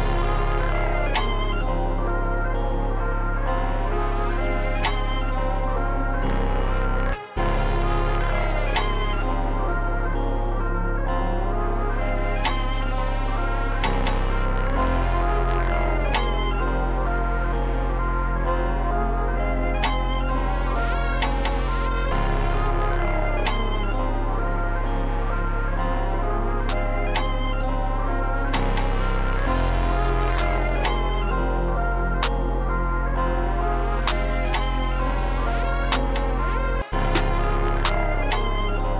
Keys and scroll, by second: 0.8 shift+d, 3.9 shift+d, 7.0 space, 7.3 space, 7.5 shift+d, 11.1 e, 12.8 super+b, 13.0 super+b, 13.6 super+z, 14.1-14.9 typing, 23.1 4, 24.4 e, 26.2 super+b, 26.3 super+b, 26.5 super+b, 26.7 super+b, 26.8 super+b, 27.0 super+b, 27.2 super+b, 27.6 super+s, 32.9 p, 33.1 super+s, 36.7 space, 38.2 super+b.